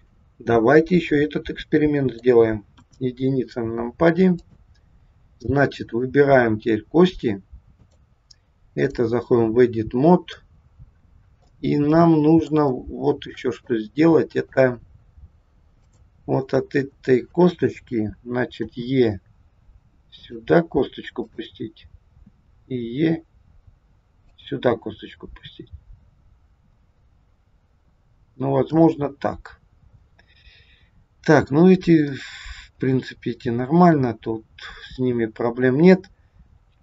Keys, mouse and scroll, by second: 1.1 middle click, 2.8 KP_1, 4.4 click, 5.8 click, 7.8 click, 9.9 scroll up 1, 10.3 middle click, 11.9 middle click, 12.7 shift+middle click, 12.8 shift+middle click, 13.7 middle click, 14.9-15.7 scroll up 1, 15.8 click, 18.7 e, 21.2 click, 22.3 e, 28.8 middle click, 32.2 middle click.